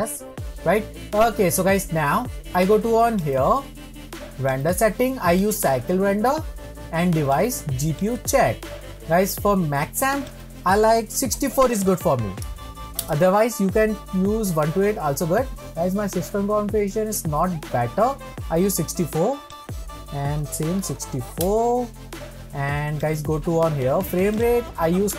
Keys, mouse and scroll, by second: 3.4 click, 5.7-13.6 drag, 21.7-22.8 drag.